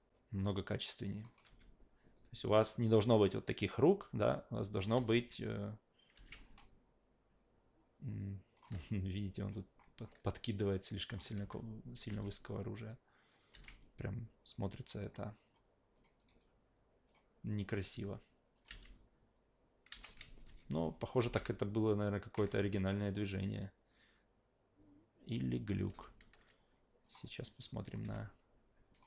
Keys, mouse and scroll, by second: 1.4 e, 2.1 click, 4.0 s, 4.8 click, 6.1 alt+v, 6.5-8.6 drag, 8.8-9.5 alt+drag, 9.8 alt+middle drag, 10.6 click, 11.4 s, 12.0 click, 13.6 alt+v, 13.8-15.5 drag, 15.9 click, 16.2 right click, 17.1 click, 17.6 click, 18.5 click, 18.7 alt+v, 19.9 alt+v, 20.2 ctrl+z, 20.4 ctrl+z, 20.9 click, 21.2 alt+v, 22.3 alt+v, 22.7-25.7 drag, 25.9 alt+g, 27.0 click, 27.7 drag, 28.0 f, 28.9 click.